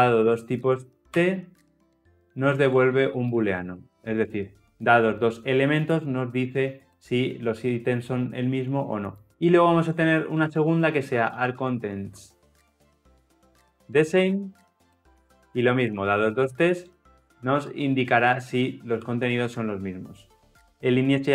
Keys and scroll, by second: 4.3 Return.